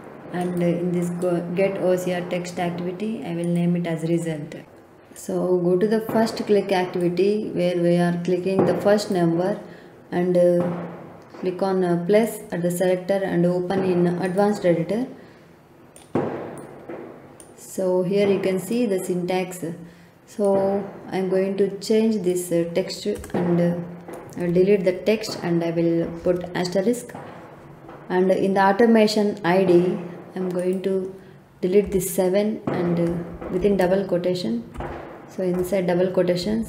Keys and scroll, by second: 23.1 BackSpace, 26.0 shift+8, 31.8 BackSpace, 33.3 shift+', 35.1 Left, 36.4 shift+=.